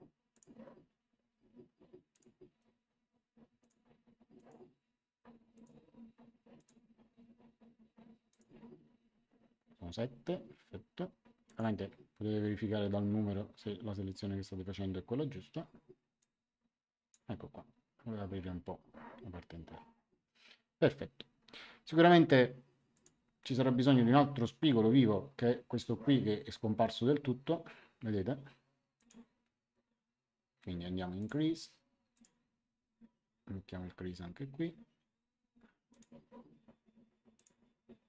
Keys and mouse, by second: 0.3 ctrl+click, 2.1 ctrl+click, 3.5 ctrl+click, 5.5 ctrl+click, 8.3 ctrl+click, 11.4 ctrl+click, 16.1 click, 22.9 click, 28.9 click, 31.1 click, 35.9 click, 37.3 click.